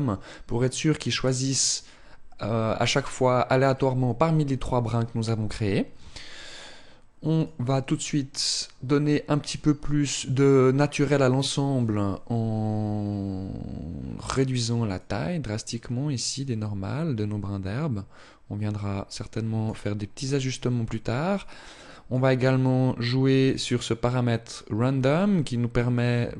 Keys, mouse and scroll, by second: 7.1 click, 13.6-14.6 scroll down 3, 14.6 click, 21.0 click, 23.2 click.